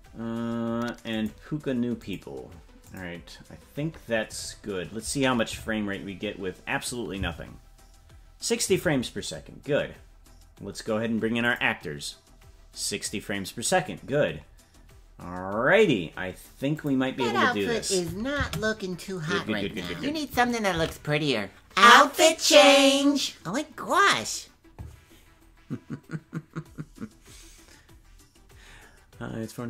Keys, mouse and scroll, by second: 7.8 space, 11.4-24.7 drag, 24.7 ctrl+s.